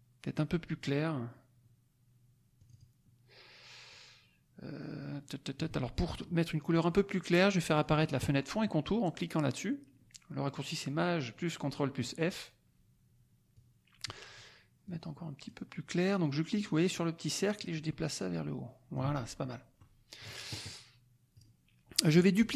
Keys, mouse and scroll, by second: 2.5 click, 3.9-5.8 drag, 7.7 click, 13.5 click, 14.8-19.1 drag, 19.7 middle click, 21.3 click.